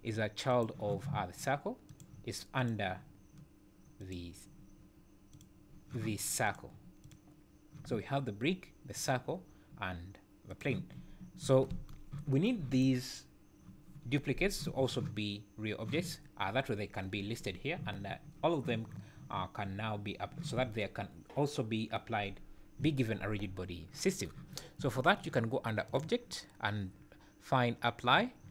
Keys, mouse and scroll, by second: 0.5 click, 1.9 click, 2.6 click, 4.0 click, 5.3 click, 6.4 click, 7.0 click, 8.9 click, 10.5 click, 12.7 click, 24.8 `, 25.9 click.